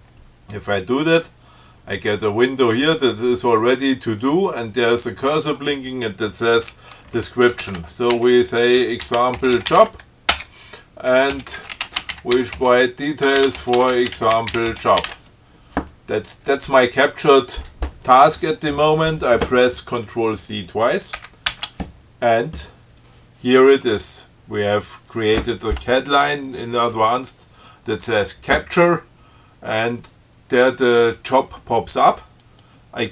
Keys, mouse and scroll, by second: 7.6-15.7 typing, 10.6 Return, 21.4 ctrl+c, 32.7 click.